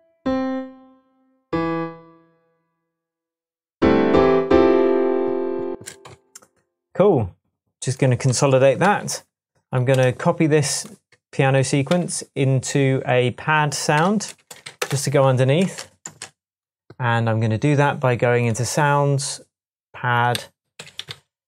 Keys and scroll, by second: 5.7 space, 6.1 Tab, 9.1 typing, 9.9 super+BackSpace, 11.9 typing, 13.9-16.0 typing, 20.3 Right, 20.7 Left, 20.9 Down, 21.1 Right.